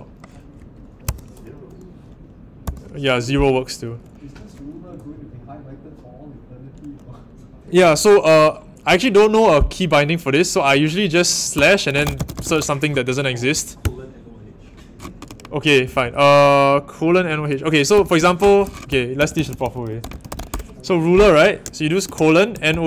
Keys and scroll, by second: 1.0 ⟲, 11.2-13.0 typing, 13.8 Return, 15.5-16.5 typing, 17.6-22.8 typing.